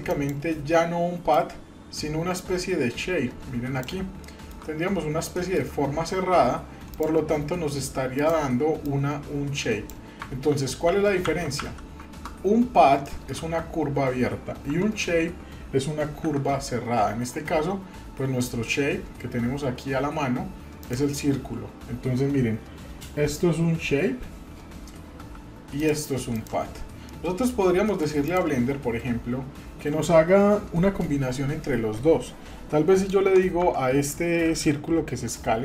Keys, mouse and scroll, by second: 0.1 click, 1.3-3.8 drag, 4.2 shift+middle click, 4.7-5.2 scroll up 1, 5.2 scroll up 2, 5.4 shift+middle click, 6.9 click, 8.1 click, 8.8-9.9 drag, 10.5 ctrl+z, 10.9 ctrl+z, 11.6 ctrl+z, 12.3-12.8 scroll down 4, 13.0 shift+middle click, 13.5 scroll up 2, 14.7 Tab, 16.2 shift+a, 25.2 g, 26.4 click, 27.1-27.5 middle drag, 27.8 middle click, 28.3 click, 33.1 Tab, 33.3 Tab, 35.3 s.